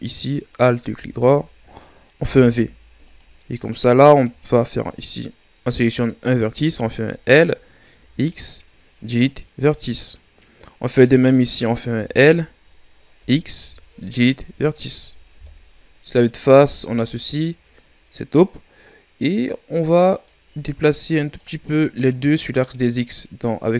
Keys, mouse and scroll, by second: 0.5-2.1 alt+shift+right drag, 2.1 v, 4.4 right click, 6.7 l, 7.9 Delete, 10.9-11.9 right drag, 11.9 l, 13.5 x, 15.3 KP_1, 16.4-17.2 scroll down 4, 17.2-20.1 shift+scroll up 5, 20.1-23.7 right drag.